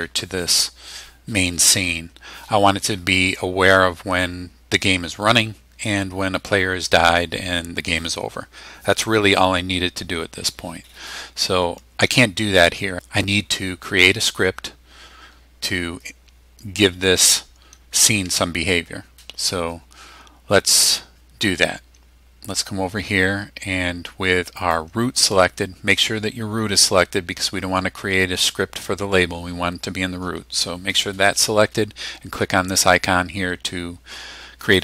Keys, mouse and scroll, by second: 24.6 click, 34.6 click.